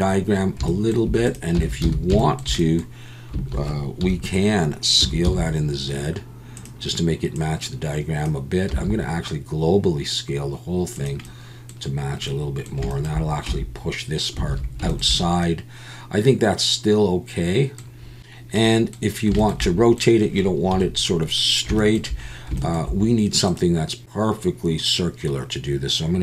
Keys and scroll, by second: 1.6 Tab, 1.8 a, 4.0 KP_1, 5.0 s, 5.2 z, 8.7 s, 13.5 Tab, 14.5 alt+a, 20.7 KP_7.